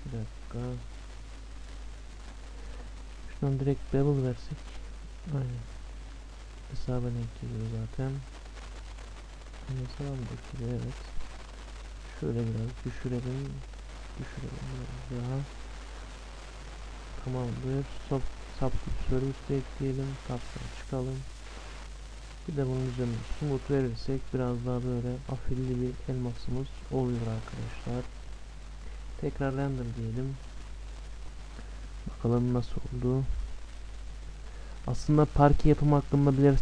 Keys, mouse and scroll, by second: 1.1-6.8 drag, 10.4-12.4 drag, 17.1-19.0 drag, 19.8 Tab, 22.2-25.0 drag, 24.2-26.1 middle drag, 27.2-29.1 middle drag, 28.1-29.6 drag.